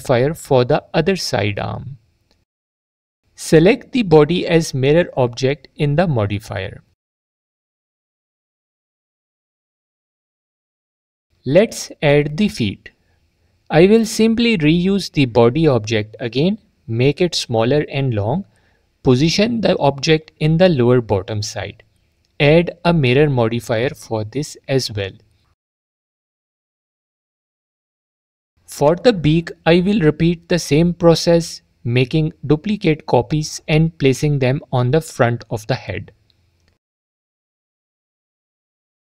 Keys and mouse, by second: 4.9 click, 9.3-10.0 alt+drag, 10.4-11.0 drag, 16.0 shift+d, 16.7 click, 17.5 s, 19.2 click, 21.0 click, 22.7-23.8 drag, 24.4 click, 26.4 click, 27.1-27.5 drag, 29.3 drag, 30.9 shift+d, 32.9 s, 33.9 s, 36.2 s, 37.3 click.